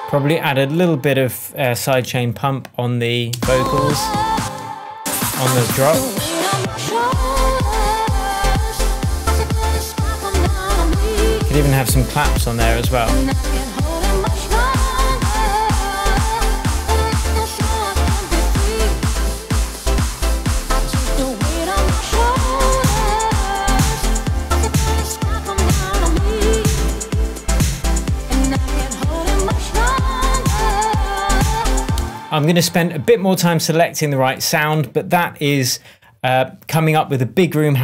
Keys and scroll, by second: 0.4 space, 2.0 super+v, 3.6 space, 5.0 space, 24.0 BackSpace, 31.9 space.